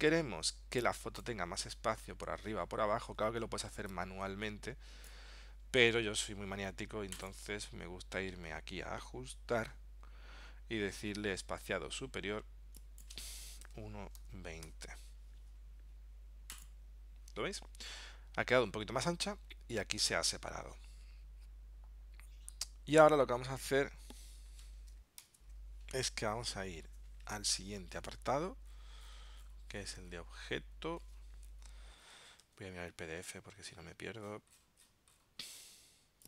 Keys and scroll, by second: 25.3 ctrl+alt+super+p, 32.5 super+Tab.